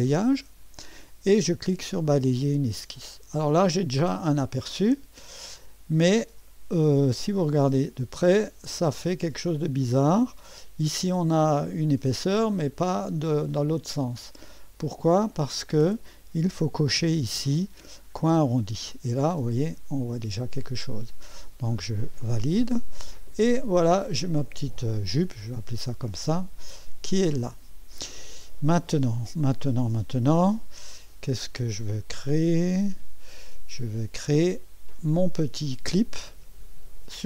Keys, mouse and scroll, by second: 0.0 click, 2.0 click, 3.1-4.0 scroll up 1, 4.0 click, 5.5 click, 6.7-7.7 scroll up 2, 8.0-10.8 drag, 12.2-16.0 drag, 17.3 click, 18.3 click, 20.0 click, 22.3 click, 24.1 click, 25.9 middle click, 26.6 click, 29.1-30.4 drag, 31.7-34.3 drag.